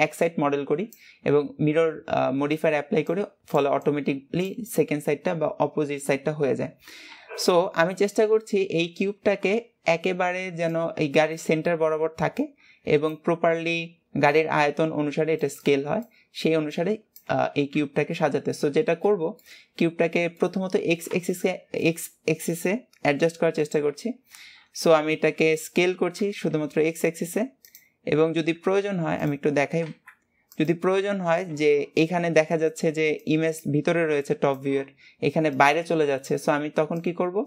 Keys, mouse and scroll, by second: 18.5-19.6 scroll up 1, 19.6-20.8 shift+middle drag, 21.5-24.6 middle drag.